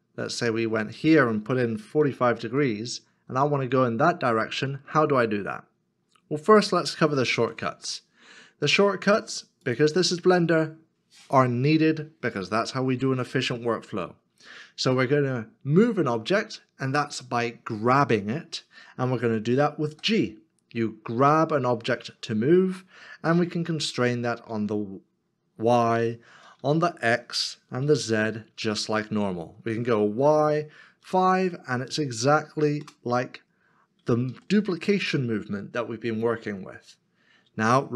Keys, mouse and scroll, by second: 1.9 middle click, 2.0 click, 7.3 ctrl+z, 7.9 middle click, 20.5 g, 24.5 g, 25.8 y, 26.6 x, 27.8 z, 30.1 y, 31.0 5, 32.8 Return, 34.5 ctrl+z.